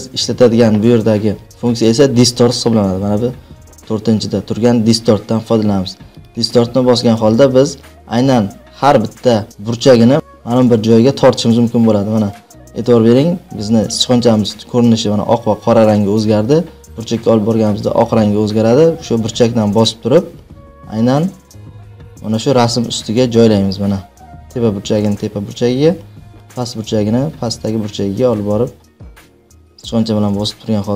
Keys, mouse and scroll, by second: 6.2 click, 19.2 click, 24.9-26.3 drag, 26.9 click.